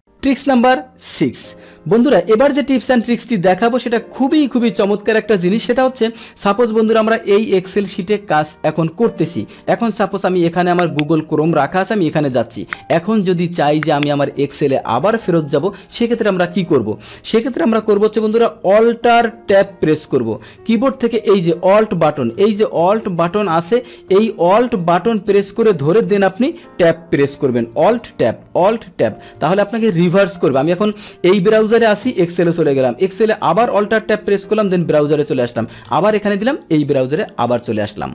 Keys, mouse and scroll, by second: 0.0 click, 10.2 click, 19.5 alt+Tab, 24.7 click, 26.0 alt+Tab, 27.9 Tab, 28.8 alt+Tab, 29.5 Tab, 32.2 Tab, 33.8 Tab, 35.9 alt+Tab, 36.6 click, 36.7 alt+Tab.